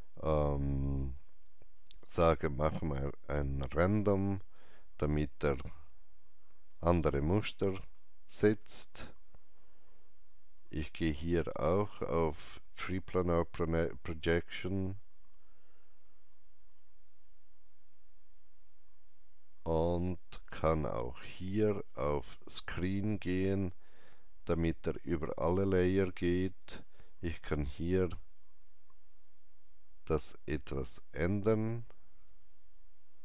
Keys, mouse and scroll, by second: 0.7 scroll down 1, 1.7 scroll down 1, 4.3 click, 4.3-4.7 scroll down 1, 5.4 click, 6.8 click, 7.7 scroll up 1, 11.3 click, 11.3-13.5 scroll up 1, 13.9 click, 21.9 click, 26.5-33.2 drag.